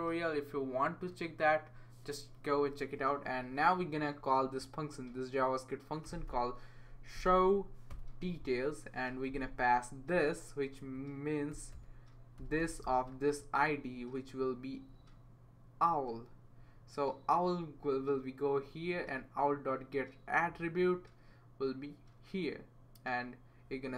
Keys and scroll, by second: 5.8-7.6 typing, 7.9 Return, 8.8-9.5 typing, 10.8 Left, 11.3-12.9 typing.